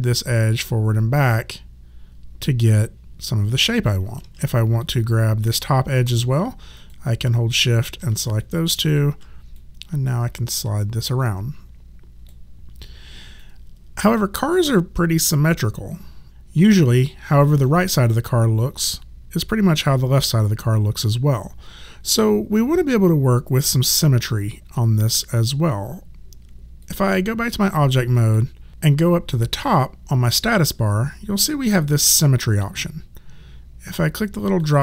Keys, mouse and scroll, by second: 4.2 ctrl+z, 4.8 alt+click, 6.8 shift+click, 8.4 alt+click, 13.4 alt+click, 26.8 right click, 28.2 click, 34.4 click.